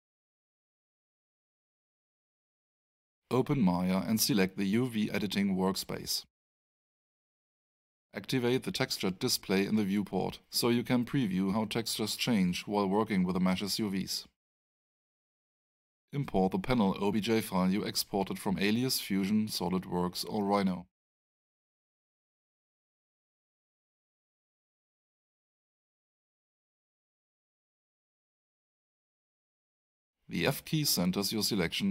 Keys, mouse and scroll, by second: 3.1 click, 6.1 click, 8.4 click, 13.5 click, 16.1 click, 19.2 click, 24.6 click, 26.7 click, 27.9 double click, 29.3 click, 30.5 f, 31.7 alt+f, 31.8 alt+click.